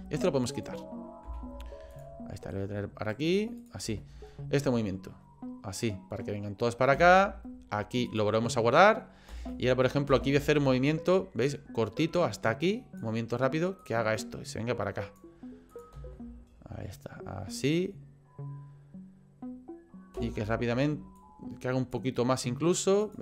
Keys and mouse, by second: 0.0 space, 0.5 click, 1.2 Delete, 2.6 click, 3.6 click, 3.8 space, 7.0 space, 8.1 click, 9.3 space, 10.1 space, 11.4-13.0 drag, 13.8-15.2 drag, 15.7 click, 16.1 space, 20.1 space, 21.2 click, 23.0 click.